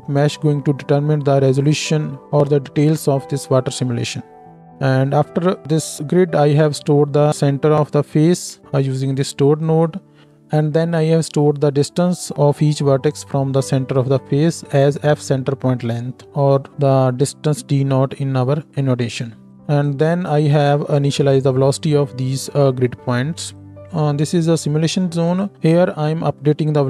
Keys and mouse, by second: 9.0-9.6 middle drag, 9.6-23.5 drag, 23.5 middle click, 23.7 x, 23.8-25.4 drag, 25.4 middle click, 25.6-26.8 drag.